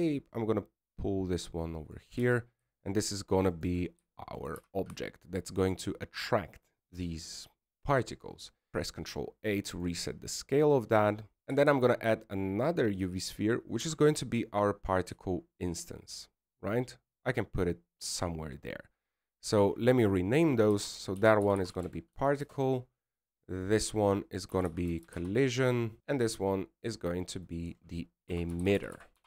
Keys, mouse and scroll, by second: 0.6 shift+middle click, 1.5 g, 4.3 s, 6.3 shift+middle click, 6.7 g, 9.4 shift+middle click, 10.5 ctrl+a, 11.6 shift+middle click, 13.8 shift+a, 16.0 g, 21.5 click, 21.7 click, 25.5 click, 25.6 click, 26.0 l, 28.5 click.